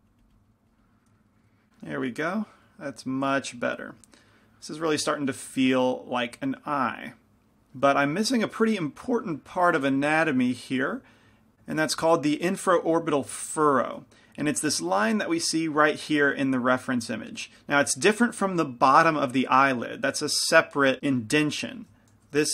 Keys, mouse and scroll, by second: 1.3 click, 1.9-4.7 middle drag.